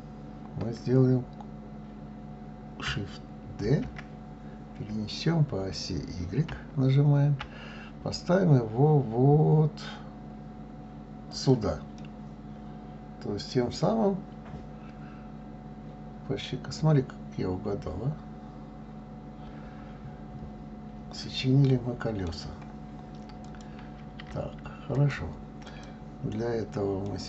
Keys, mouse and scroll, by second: 3.7 shift+d, 12.0-15.0 middle drag, 23.5 click, 25.0 click, 25.7 click, 27.0-27.2 middle drag.